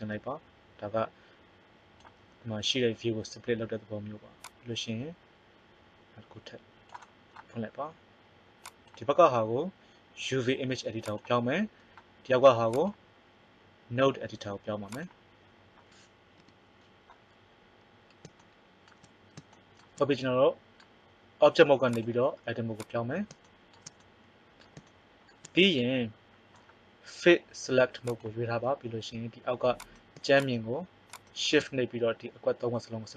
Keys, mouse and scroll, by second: 4.4 click, 16.4 n, 21.8 click, 23.4 click, 29.8 right click, 30.2-32.5 right drag.